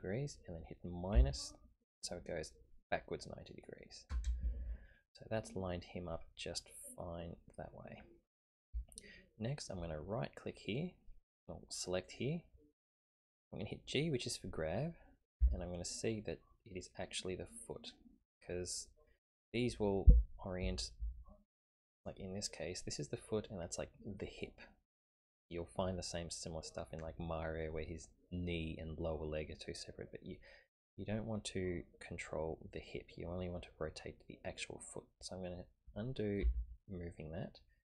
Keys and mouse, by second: 6.6-8.0 middle drag, 8.8-9.8 shift+middle drag, 12.0 right click, 15.1-15.4 typing, 36.5 ctrl+z.